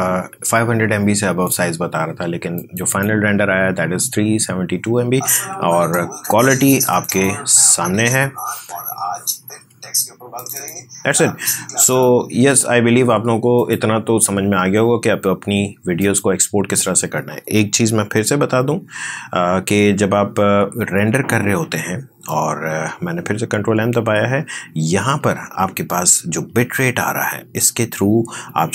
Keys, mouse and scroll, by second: 6.9 click, 10.6 click, 16.0 click, 18.0 ctrl+m, 25.1-26.1 scroll down 1.